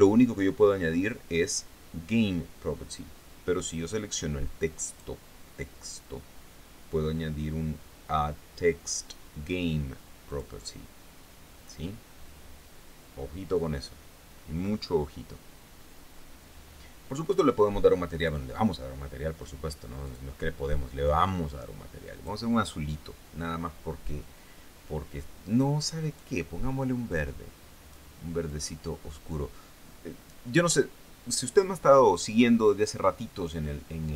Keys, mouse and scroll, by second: 5.3 right click, 10.8 click, 17.8 click, 18.6 click, 20.5 click, 21.5-22.9 drag, 26.6 click, 27.6 click, 28.9-31.2 drag.